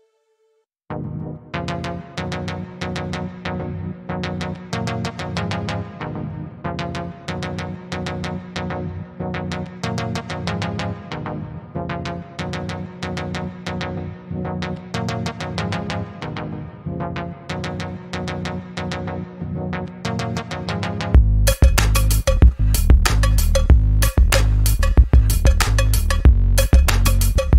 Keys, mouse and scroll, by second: 0.1 click, 4.4 click, 5.5 ctrl+z, 6.0-6.6 click, 6.9 ctrl+z, 7.6 Return, 8.3 z, 8.8 z, 9.1-9.8 click, 10.1 v, 11.2 click, 13.0 ctrl+z, 13.5-14.1 click, 14.4 ctrl+z, 14.8 click, 15.6 Left, 17.6-18.8 drag, 20.9-21.6 scroll down 1, 24.2-26.4 drag.